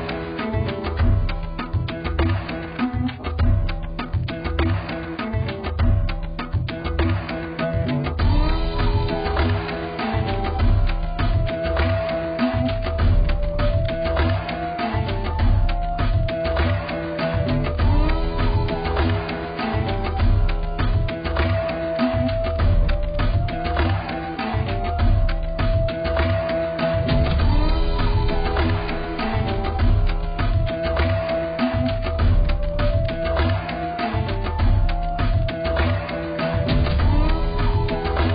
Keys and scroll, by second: 11.0 b, 21.7 x, 23.3 [, 23.5 [.